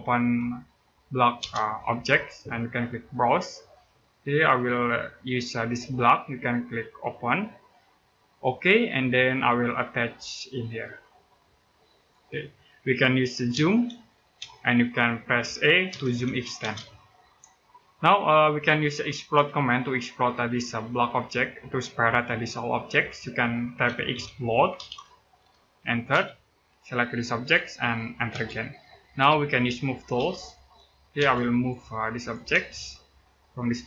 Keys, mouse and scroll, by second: 1.2 space, 2.9 click, 8.8-9.2 scroll down 1, 9.2 middle click, 11.7 click, 13.3 z, 14.2 space, 15.7 e, 16.4 space, 17.1-17.5 scroll down 1, 17.5 middle click, 23.4-25.9 typing, 27.1 click, 28.1 space, 28.8 middle click, 29.9 m, 31.0 space, 31.3 click, 32.3 space, 32.4-33.3 scroll up 1, 33.3 click, 33.7 scroll down 1.